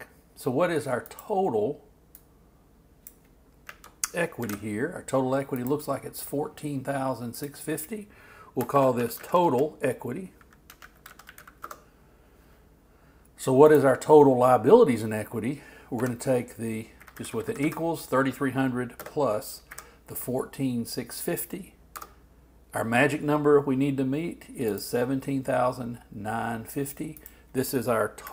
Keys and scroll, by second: 4.4 shift+super+t, 8.5-9.5 typing, 28.1-28.3 typing.